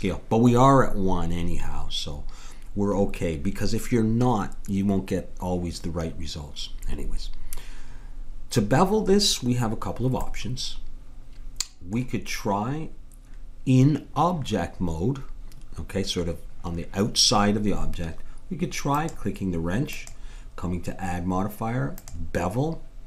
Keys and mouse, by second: 10.2-12.4 middle drag, 18.9-21.7 drag.